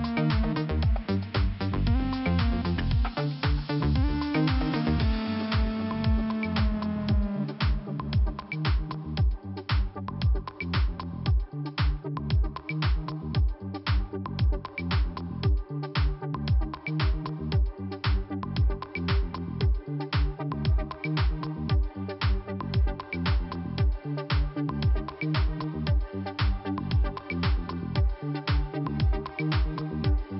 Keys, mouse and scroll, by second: 1.0 click, 3.1 click, 7.2 click, 7.7 click, 8.5 click, 11.0 click, 12.5 click, 13.6 click, 14.8 click, 15.8 click, 20.0 click, 22.0 click, 26.3 click, 27.9 click, 30.0 click.